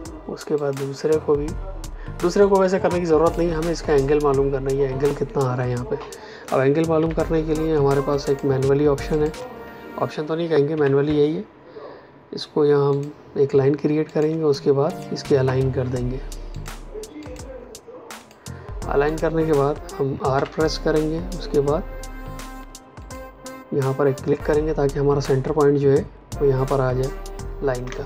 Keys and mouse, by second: 0.5 click, 6.9 p, 8.2 click, 9.0 shift+click, 12.8 click, 14.0 shift+click, 14.8 click, 20.3 r, 22.9 click, 27.8 space.